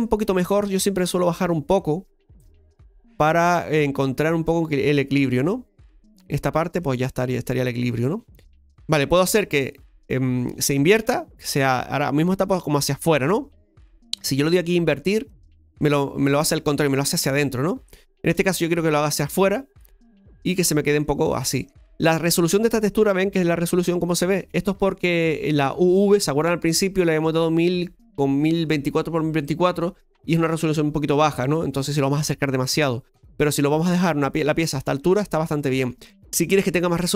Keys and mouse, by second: 1.4-6.2 drag, 6.9-8.5 middle drag, 8.5-9.7 drag, 10.8-11.6 middle drag, 15.4-17.0 drag, 17.0-18.1 middle drag, 19.4 click, 19.9-20.4 middle drag, 34.0 middle click, 35.1 middle click.